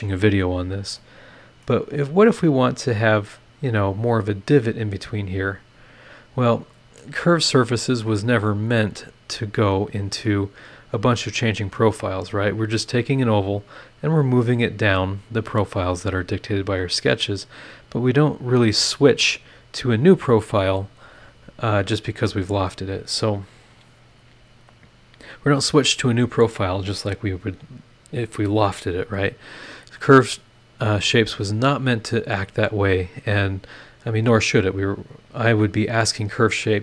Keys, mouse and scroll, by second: 1.0 middle click, 1.8 scroll up 1, 9.6 scroll down 1, 10.2-11.9 middle drag, 10.3-11.9 drag, 10.3-11.9 right drag, 16.4 click, 18.2 click.